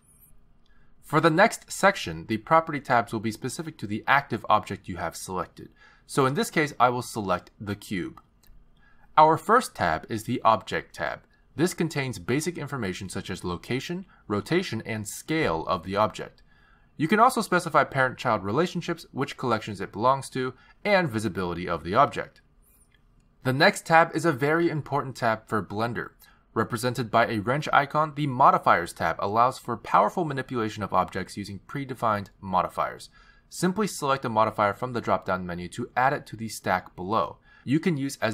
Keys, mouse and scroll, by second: 8.2 click, 10.9 click, 18.0-18.8 scroll down 2, 18.8 click, 19.7-21.1 scroll down 7, 20.7 click, 21.8 click, 22.0-22.8 scroll down 3, 24.0 click, 29.3 click, 37.7 click.